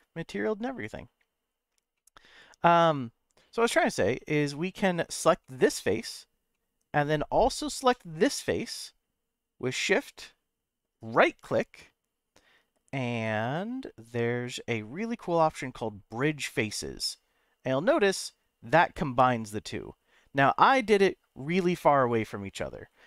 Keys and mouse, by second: 1.9 middle click, 3.6-4.7 middle drag, 5.4 middle click, 6.5 middle click, 7.9 shift+click, 9.7 middle click, 11.0-16.5 right drag, 17.1-20.1 middle drag, 20.7-22.7 middle drag.